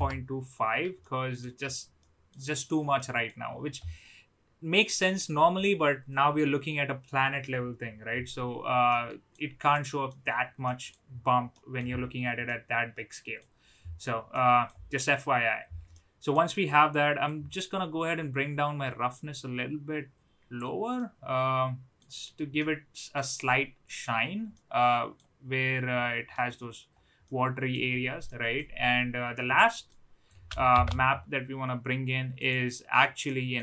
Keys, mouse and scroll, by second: 1.0-1.3 middle drag, 1.9-2.3 middle drag, 2.9 middle drag, 8.8-9.2 middle drag, 9.7-10.0 middle drag, 10.5 middle drag, 11.5 middle drag, 12.4-13.3 middle drag, 14.3-14.6 middle drag, 16.0 middle click, 17.2-20.6 drag, 20.9-22.0 middle drag, 22.5-24.0 middle drag, 24.5-25.1 middle drag, 26.2-26.7 middle drag, 27.2-27.7 middle drag, 28.2-28.5 middle drag, 29.5 middle click, 30.2 click, 30.7 shift+d, 33.3 middle click.